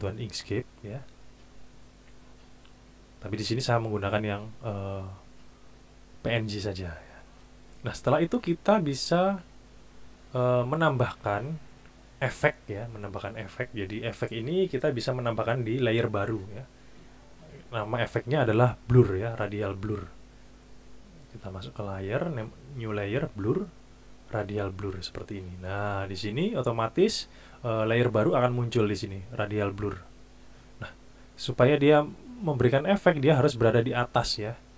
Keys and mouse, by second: 21.0-24.9 drag.